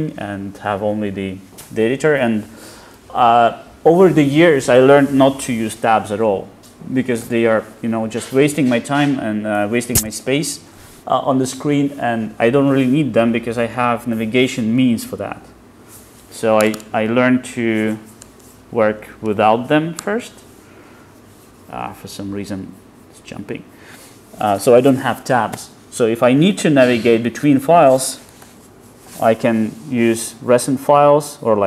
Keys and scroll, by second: 28.5 super+e.